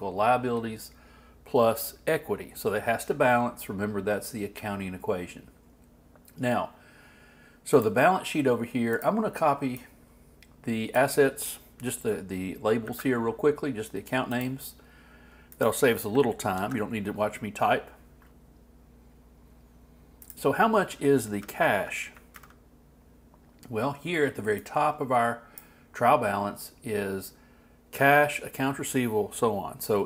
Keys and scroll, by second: 12.8 super+c, 16.6 super+v, 22.3 alt+Left.